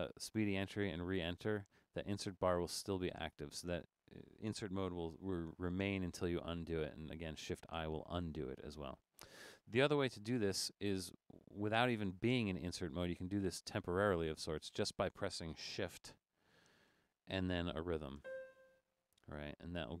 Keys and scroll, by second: 7.6 |, 10.4 Left, 10.5 BackSpace, 12.0 Left, 12.5 Left, 16.4 Up, 16.6 Up, 18.2 shift+5, 19.7 Down.